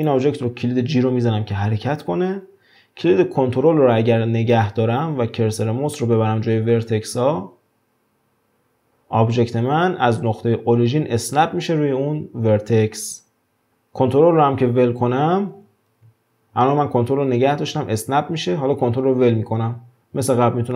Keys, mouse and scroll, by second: 1.5 g, 15.5 g.